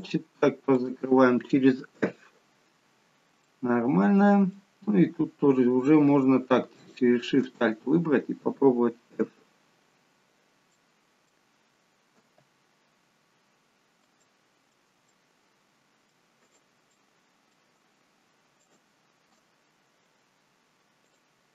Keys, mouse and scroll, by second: 0.7 shift+click, 2.0 f, 3.5 middle click, 6.8 alt+shift+click, 7.9-8.4 scroll down 2, 9.2 f, 10.7 middle click, 13.8 scroll up 2, 14.2 shift+middle click, 15.2 middle click, 16.5 click, 17.0 middle click, 18.7 alt+shift+click, 21.1 click.